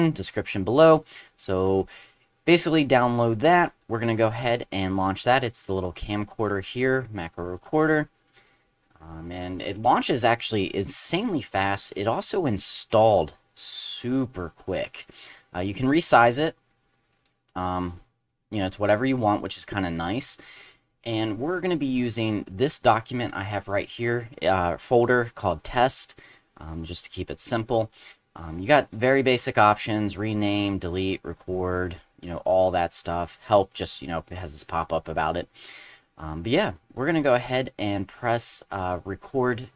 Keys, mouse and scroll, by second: 4.5 click, 7.5 click, 7.7 click, 9.8-11.2 drag, 12.2-14.7 drag, 15.7-17.1 drag, 18.0-19.1 drag, 19.4 click, 21.5-22.5 drag, 28.9 click, 33.7 click, 35.1 click.